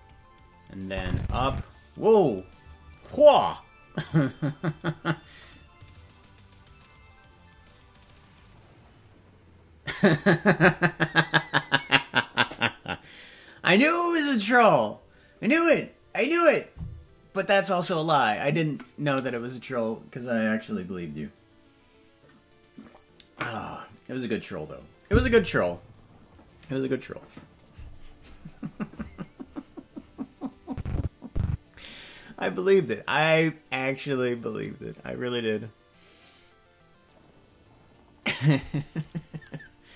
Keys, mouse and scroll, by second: 0.9 click, 30.7 click.